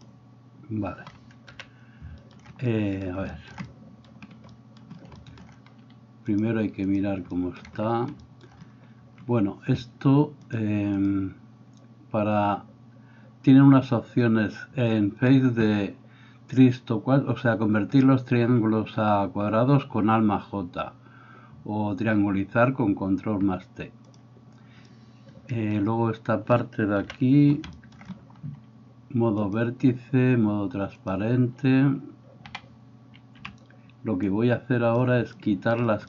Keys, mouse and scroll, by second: 1.5 KP_1, 2.2-7.3 middle drag, 2.2 right click, 3.2 shift+right click, 10.6 middle click, 11.1-36.0 drag, 27.1 KP_1, 32.6 a, 33.4 b.